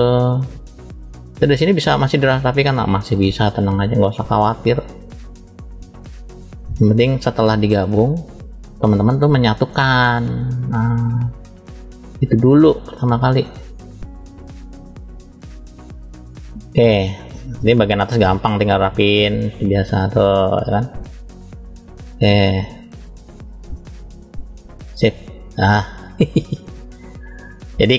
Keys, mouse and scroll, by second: 0.6-1.8 middle drag, 2.2 click, 6.1 middle click, 7.1 click, 9.6 middle click, 10.4 click, 13.3 middle click, 14.2-16.4 drag, 16.8-17.4 scroll down 2, 17.4 shift+middle click, 18.2-19.0 scroll up 1, 19.0 click, 19.0 scroll up 1, 20.8 click, 22.1 click, 23.7-26.0 drag, 26.0-26.7 scroll down 3, 26.5 middle click, 27.5 middle click.